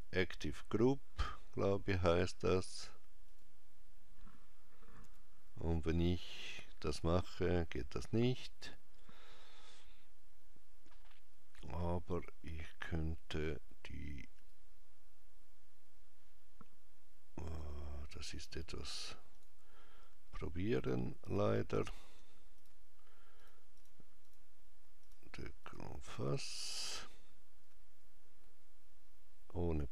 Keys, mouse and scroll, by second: 2.3 click, 3.1 click, 4.8 g, 14.1 click, 17.2 click, 17.8-19.1 scroll up 3, 19.1 click, 20.5 shift+click, 22.3 shift+click, 25.4 shift+click, 26.4-27.8 scroll down 2, 28.2 scroll down 2.